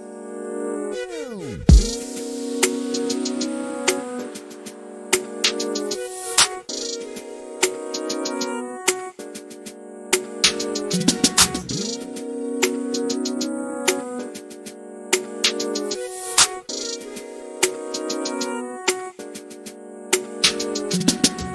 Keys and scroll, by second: 0.2-2.9 typing, 4.4 k, 12.0 k, 14.9 m, 19.0 m.